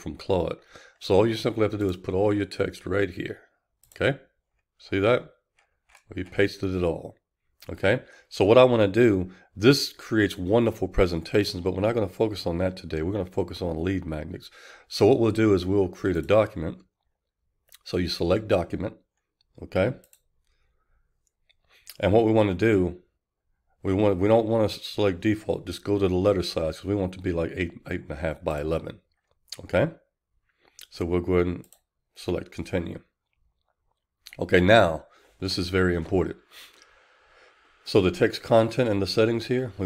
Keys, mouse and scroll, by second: 33.6-39.8 drag.